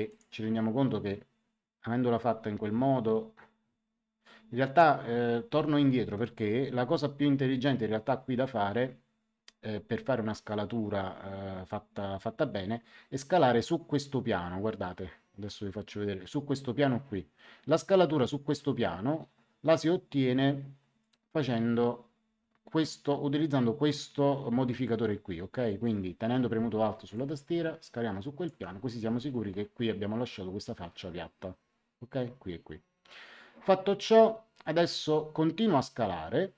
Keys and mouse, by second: 0.0 click, 27.1 click.